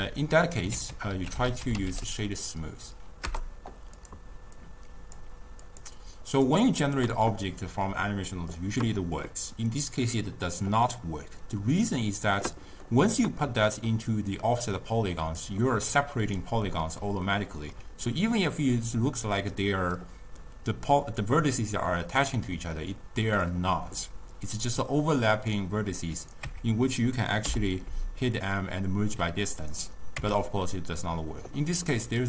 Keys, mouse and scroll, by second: 0.8 ctrl+a, 4.7-6.2 drag, 12.9 middle click, 13.4 scroll down 1, 13.5 scroll up 1, 13.6 middle click, 14.4-16.8 drag, 16.8-24.6 middle drag, 24.6 click, 26.6 Tab, 27.6 m, 30.3 Tab.